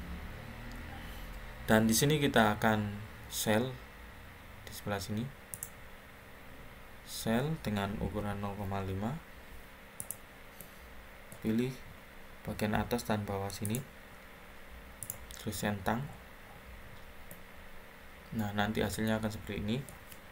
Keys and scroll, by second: 8.1-8.5 typing.